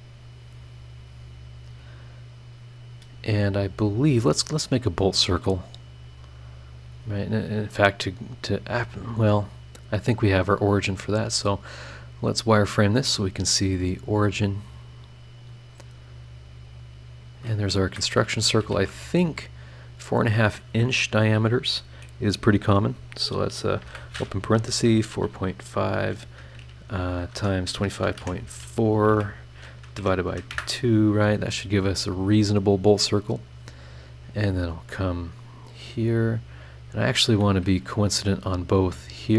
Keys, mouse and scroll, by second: 0.8 click, 1.4 scroll down 2, 1.9-2.5 scroll up 4, 5.0 click, 5.9 click, 7.6 click, 10.1 click, 11.0 click, 12.0 scroll down 2, 12.4 scroll up 2, 15.3 click, 16.7 click, 17.3 click, 17.9 Escape, 18.7 shift+r, 20.1 click, 23.8 shift+9, 24.5 KP_4, 24.7 KP_Decimal, 24.9 KP_5, 27.3 KP_Multiply, 27.7-29.1 typing, 30.0 KP_Divide, 30.3 KP_2, 30.5 KP_Enter, 33.4 click, 34.2 click, 36.9 click, 37.4 click, 37.8 Escape, 38.3 click, 39.0 click.